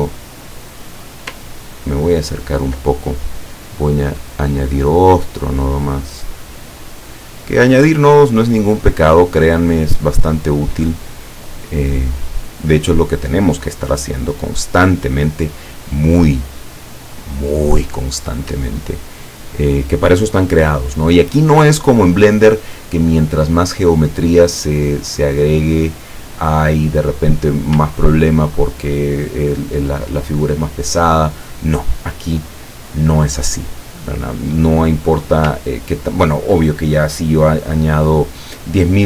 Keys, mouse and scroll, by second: 1.9-2.5 ctrl+scroll up 4, 3.9 click, 4.6-8.9 drag, 12.1-13.5 drag, 14.1-18.3 drag, 18.9-19.4 ctrl+scroll down 2, 22.6-23.0 ctrl+scroll up 2, 25.2 click, 28.2-28.8 ctrl+scroll down 2, 35.7 ctrl+scroll up 2, 36.3 ctrl+scroll down 2.